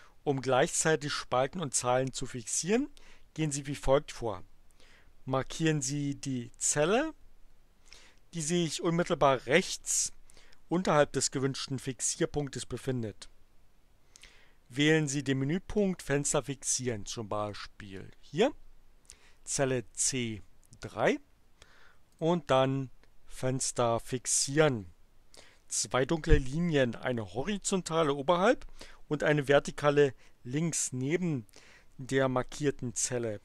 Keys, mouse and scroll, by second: 17.4 click, 22.1 click, 24.4 click.